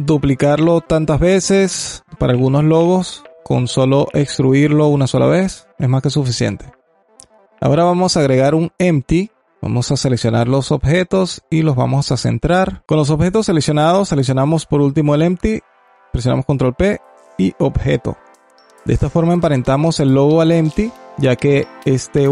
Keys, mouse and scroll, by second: 1.2-1.6 scroll up 1, 1.6-2.0 alt+middle drag, 2.0-3.6 alt+drag, 3.6-3.9 scroll down 1, 3.9-4.5 alt+drag, 4.8 shift+a, 8.2 KP_7, 9.4 click, 9.9 g, 13.9 shift+click, 15.7 ctrl+p, 19.0-19.8 alt+drag, 19.8-20.3 scroll down 3, 20.3-20.9 alt+drag, 21.6 alt+click, 22.1 r.